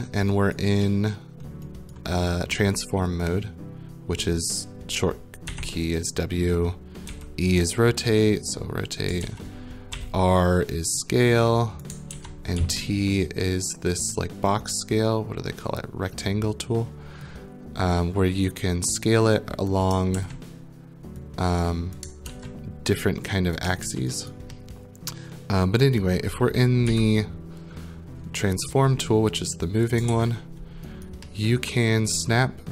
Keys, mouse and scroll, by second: 0.1 middle click, 0.6 right click, 0.8 middle click, 1.4 middle click, 1.9 right click, 5.5 w, 7.1 e, 9.0 click, 9.2 ctrl+z, 9.9 r, 11.8 click, 12.1 ctrl+z, 12.6 t, 19.7 click, 20.1 ctrl+z, 22.0 click, 22.3 ctrl+z, 23.5 click, 23.8 ctrl+z, 24.3 right click, 26.9 w, 28.7 right click, 30.0 ctrl+click, 30.1 ctrl+z, 31.1 right click, 31.9 middle click, 32.4 right click.